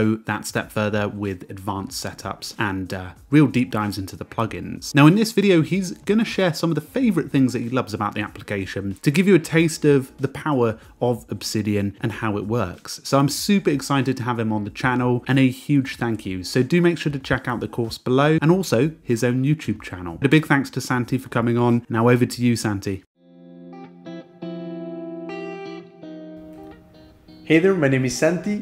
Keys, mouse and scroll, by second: 12.1 Escape, 12.4 ctrl+r, 13.1 ctrl+,, 13.4 Escape, 13.6 j, 13.9 i.